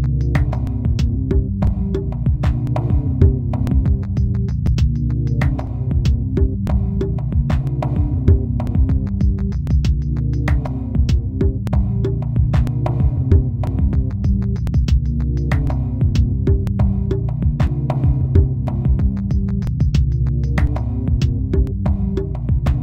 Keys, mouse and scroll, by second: 1.7 ctrl+KP_Add, 2.9 ctrl+KP_Add, 3.9 ctrl+KP_Subtract, 4.5 ctrl+KP_Subtract, 5.3 ctrl+KP_Subtract, 5.7 ctrl+KP_Subtract, 6.3 ctrl+KP_Subtract, 7.7 Tab, 8.1-8.5 scroll down 1, 8.5-8.9 scroll up 1, 8.9 Tab, 9.9 Tab, 9.9 KP_Divide, 9.9 right click, 9.9 shift+middle click, 10.2 scroll up 2, 10.4 a, 10.6 middle click, 14.3 click, 15.7 l, 18.0 l, 19.9 l, 20.7 l, 21.9 a, 22.0 right click.